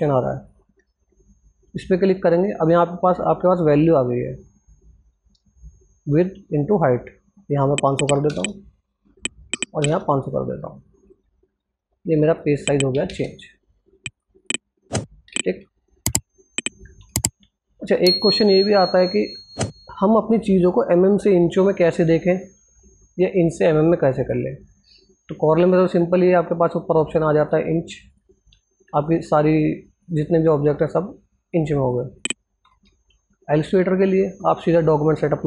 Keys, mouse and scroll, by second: 11.2 Tab, 11.9 click, 12.7 ctrl+space, 13.7 click, 14.7-15.3 ctrl+alt+scroll down 2, 15.5 ctrl+alt+scroll up 2, 16.7 alt+Tab, 17.6-18.3 scroll up 2, 27.6 click, 31.7 click, 32.3 alt+Tab.